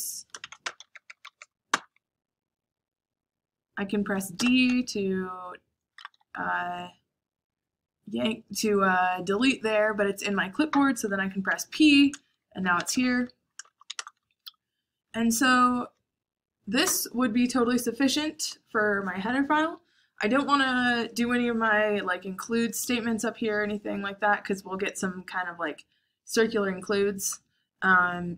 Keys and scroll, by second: 0.0-1.7 typing, 4.1 d, 5.4-6.6 typing, 11.2-14.2 typing.